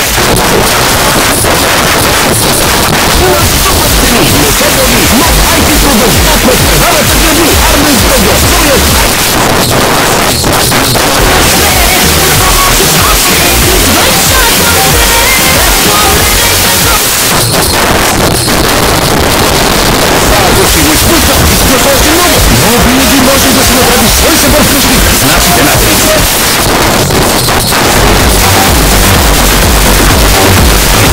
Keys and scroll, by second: 9.0 Page_Down, 16.9 Page_Down, 26.3 Page_Down.